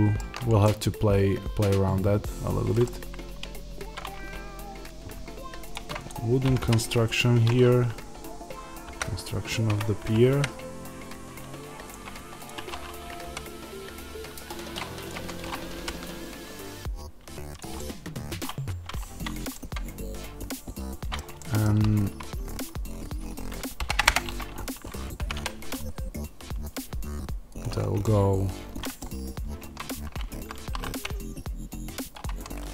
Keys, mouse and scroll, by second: 5.3 g, 5.6 click, 6.3 g, 9.7 Escape, 9.9 g, 11.8 click, 12.9 g, 14.9 click, 15.0 Tab, 15.6 g, 17.5 click, 17.6-27.5 middle drag, 18.5 Tab, 23.6 shift+d, 24.0 Return, 25.1 g, 27.5 click, 29.5 Tab, 30.2 a, 32.1 click, 32.2 Tab.